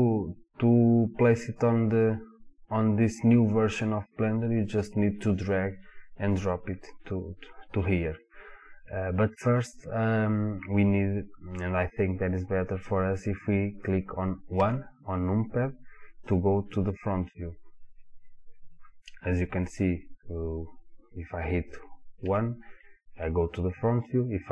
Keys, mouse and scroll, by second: 14.6 KP_1, 22.2 KP_1.